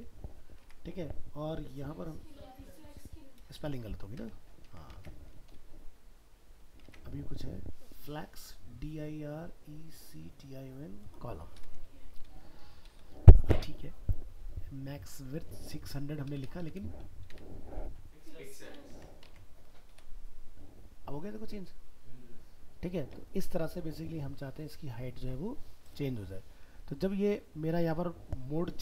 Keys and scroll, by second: 4.7 ctrl+s, 5.0 alt+Tab, 18.9 ctrl+s, 19.3 alt+Tab, 27.8 alt+Tab.